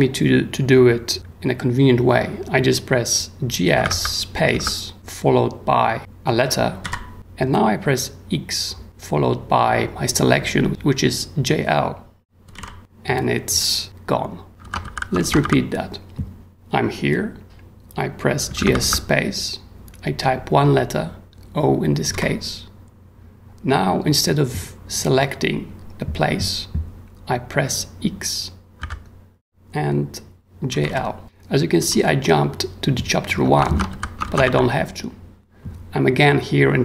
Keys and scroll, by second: 3.5-4.5 typing, 6.8 o, 12.2-13.0 typing, 14.5 ctrl+u, 14.6 ctrl+w, 16.4 w, 18.2-19.1 typing, 22.1 o, 28.8 x, 30.5-31.8 typing, 33.7 ctrl+w, 35.3 w.